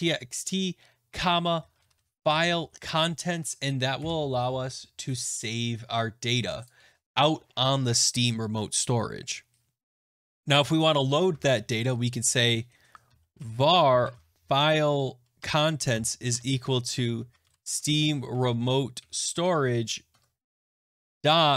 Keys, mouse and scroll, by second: 0.9-4.4 typing, 3.3 Right, 6.5 click, 9.9 click, 10.3 click, 11.2 Tab, 12.7-14.5 typing, 15.3 Tab, 15.9-21.5 typing.